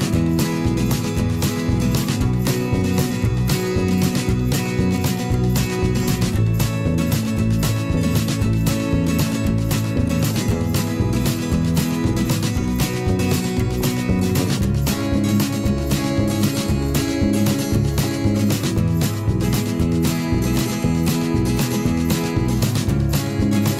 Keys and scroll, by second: 0.3 ctrl+shift+[, 0.7 ctrl+], 3.2 ctrl+[, 6.3 ctrl+[, 8.6 ctrl+shift+[, 8.8 ctrl+], 16.4 ctrl+[, 20.2 ctrl+[, 23.0 ctrl+shift+[, 23.2 ctrl+].